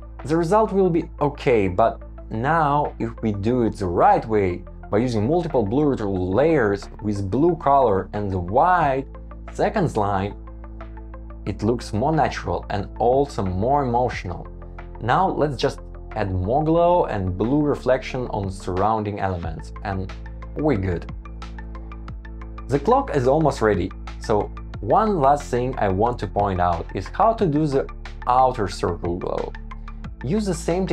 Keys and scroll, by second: 1.5 shift+Up, 2.8 super+v, 5.4 shift+Up, 5.9 shift+Up, 6.4 shift+Down, 7.0 shift+Up, 7.6 Escape, 10.7 Escape, 13.3 super+c, 13.5 super+v, 14.7 shift+Up, 15.3 Escape, 15.4 super+z, 15.5 super+v, 15.7 shift+Up, 16.4 alt+super+c, 16.6 alt+super+c, 16.6 alt+super+v, 17.0 shift+Down, 17.4 Up, 18.1 Escape, 18.7 shift+Up, 18.9 Escape, 19.1 super+z, 20.0 Escape, 20.1 shift+Down, 21.6 shift+Up, 21.7 super+c, 22.0 Escape, 22.2 super+z, 22.6 Return, 22.9 shift+Up, 23.2 Escape, 23.3 super+v, 23.9 Escape, 24.0 super+v, 24.5 Escape, 24.9 Escape, 25.7 Escape, 26.9 Return, 28.1 shift+Up, 28.3 Escape, 28.3 super+z, 28.4 Escape, 29.0 super+c, 29.1 Return, 29.7 alt+super+v, 30.4 alt+super+c.